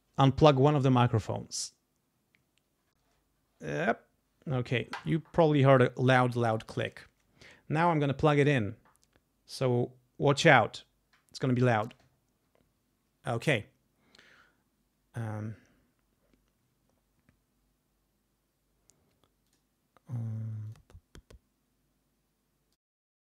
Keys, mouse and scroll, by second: 19.4 click, 20.7 click, 22.7 click.